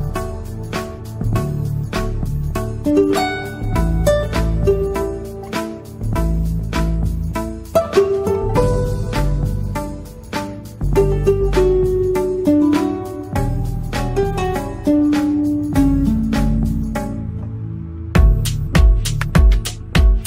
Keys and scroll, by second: 9.7 ctrl+z, 14.8 Escape, 15.0 F3, 17.9 shift+F2, 18.6 F9.